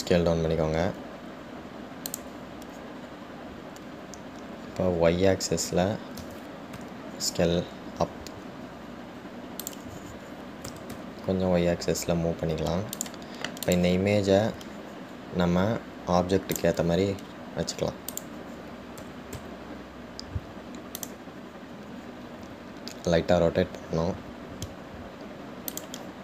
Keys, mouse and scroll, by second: 4.2-6.0 scroll up 2, 6.0-7.4 scroll down 2, 7.4 s, 14.8 click, 17.8 click, 18.5 scroll up 2, 19.3 click.